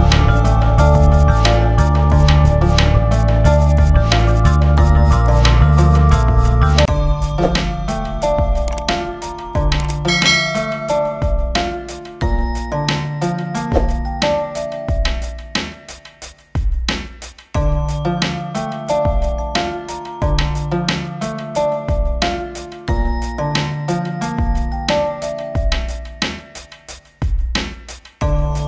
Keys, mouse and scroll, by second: 0.0 click, 0.5 click, 0.9 click, 1.7 scroll down 1, 1.9 scroll up 1, 2.1 click, 2.3 ctrl+v, 2.5 click, 2.8 click, 3.4 F4, 3.6 click, 3.9 ctrl+s, 4.0 click, 4.6 scroll down 1, 4.7 scroll up 1, 4.9 click, 4.9-5.3 scroll down 1, 5.5 scroll up 1, 5.5 scroll down 1, 5.6 click, 6.1-7.1 scroll down 4, 6.5 click, 6.7 click, 7.3 click, 7.6 scroll down 1, 8.2 scroll down 1, 8.4 click, 9.4 click, 9.9 click, 10.0-11.2 typing, 10.3 click, 10.7 click, 11.0 scroll down 1, 11.1 scroll up 1, 11.3 scroll down 1, 11.4 click, 11.5 click, 11.6 scroll up 1, 11.7 click, 12.2 scroll down 1, 12.3 scroll up 1, 12.4 click, 12.5-13.1 scroll down 2, 12.7 F4, 12.7 click, 12.8 shift+F2, 13.1 click, 13.2 scroll up 1, 13.3 click, 13.4 alt+space, 13.7 Return, 13.9 click, 14.8 click, 15.7 click, 15.8 click, 16.6 click, 17.0 F4, 17.3 click, 17.8 F4, 18.9 click, 19.1 scroll up 1, 19.2-19.5 scroll down 1, 19.5 ctrl+z, 19.7 scroll down 1, 19.9 click, 20.1 F4, 20.3 click, 20.4 ctrl+s, 20.5 click, 20.5 scroll down 1, 20.8-21.1 scroll, 21.1 scroll up 1, 21.3-21.7 scroll down 2, 22.7 scroll down 1, 24.1 scroll down 1, 24.2 click, 24.6 scroll down 2, 25.3 click, 25.9 scroll down 1, 26.5 scroll up 1, 26.7-27.1 scroll down 2, 26.9 click, 27.2 click, 27.8 click, 28.1 F4.